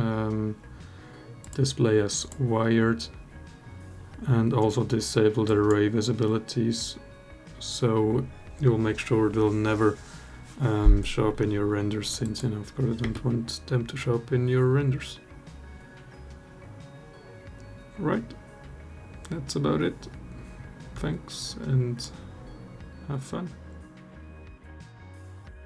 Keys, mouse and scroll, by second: 1.2-2.1 drag, 12.0 click, 13.0 space, 21.2-22.0 alt+drag.